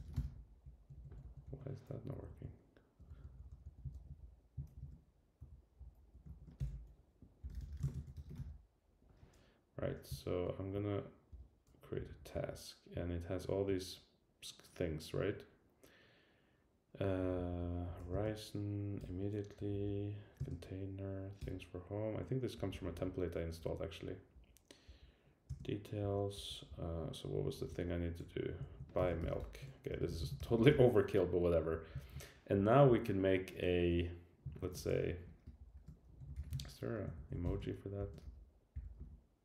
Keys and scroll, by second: 2.1 Up, 2.7 Up, 3.8 Up, 4.2 Down, 4.7 shift+super+Down, 5.4 Down, 6.0 Up, 6.3 shift+Down, 11.3 Return, 12.1 super+Down, 17.0 Down, 17.8 Down, 18.0 Right, 19.0 Return, 19.6 Up, 21.4 Return, 22.5 Down, 23.3 Down, 24.5 Down, 25.0 Down, 26.0 Up, 26.3 Down, 26.7 Up, 27.7 Down, 28.2 Right, 31.7 Up, 32.0 super+Down, 34.5 shift+super+Right, 37.1 shift+super+Left.